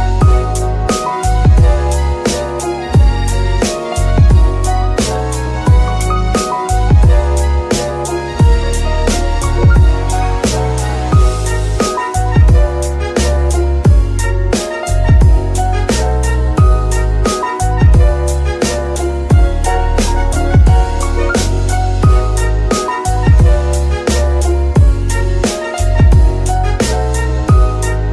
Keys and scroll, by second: 5.6 g, 5.7 y, 7.9 z, 10.1 KP_3, 21.0 shift+z, 23.1 z.